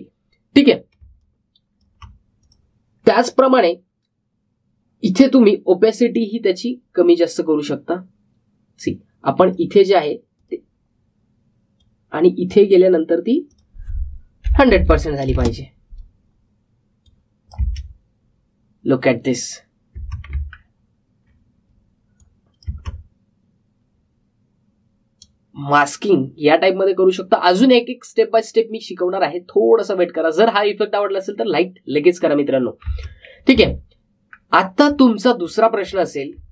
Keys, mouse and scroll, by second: 0.2-1.4 alt+scroll down 1, 1.7 alt+scroll up 1, 1.9 space, 2.1 click, 2.4 space, 3.3 click, 6.9-16.5 drag, 18.0 click, 18.5 space, 20.9 space, 21.4-22.1 alt+scroll down 1, 23.1 click, 23.6 space, 33.8 space, 34.8-35.2 alt+scroll up 1, 35.5 alt+scroll down 1, 35.8 space, 35.9 click.